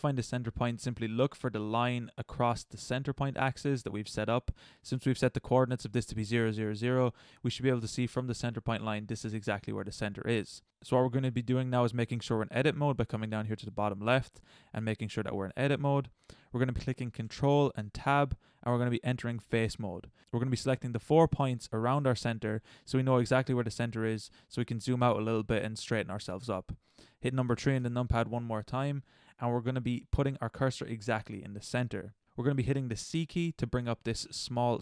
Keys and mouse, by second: 1.6-3.5 middle drag, 6.7-7.7 middle drag, 9.6-12.0 middle drag, 17.8 ctrl+Tab, 20.3-21.6 middle drag, 22.6-23.5 middle drag, 23.7-25.6 middle drag, 27.8 KP_3.